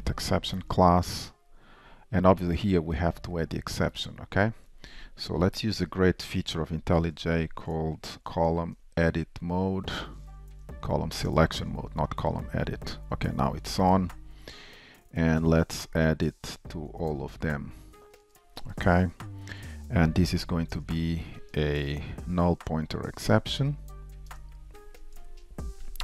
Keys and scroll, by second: 2.5 Return, 4.0 super+v, 11.3 shift+super+a, 15.9 alt+shift+Insert.